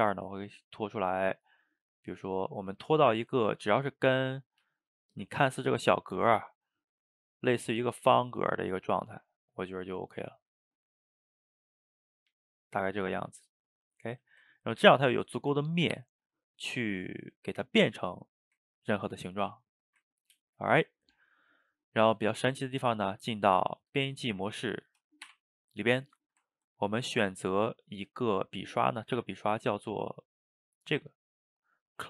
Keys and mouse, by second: 0.3-3.4 drag, 5.4-8.4 ctrl+middle drag, 8.4-11.4 shift+drag, 13.2 ctrl+middle click, 14.0 a, 14.1 a, 14.2-19.8 ctrl+middle drag, 19.8 shift+right click, 20.1-21.2 ctrl+shift+middle drag, 21.2 Tab, 23.7-25.3 shift+middle drag, 25.3 t, 26.2-29.6 shift+middle drag.